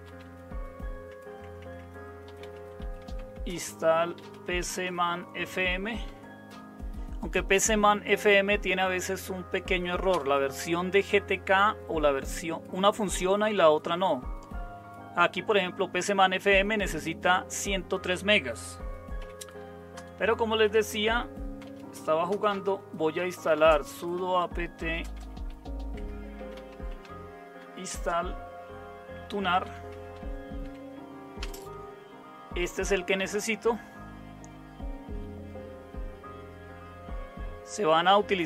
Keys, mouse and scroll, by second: 0.0-6.5 typing, 10.1 Return, 19.2 typing, 19.9 Return, 20.5-27.9 typing, 29.2-31.4 typing.